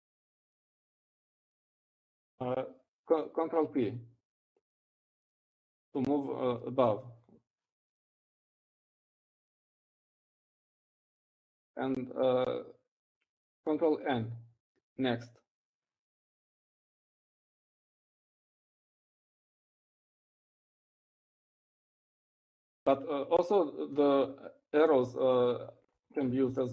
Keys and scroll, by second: 1.0-2.2 ctrl+b, 2.4 ctrl+b, 2.5 ctrl+b, 2.9 ctrl+b, 11.5 ctrl+p, 11.9 ctrl+p, 13.0 ctrl+p, 13.2 ctrl+p, 13.9 ctrl+p, 19.9 ctrl+n, 20.0 ctrl+n, 20.2 ctrl+n, 20.5 ctrl+n, 20.9 ctrl+n, 21.0 ctrl+n, 21.2 ctrl+n, 21.4 ctrl+n.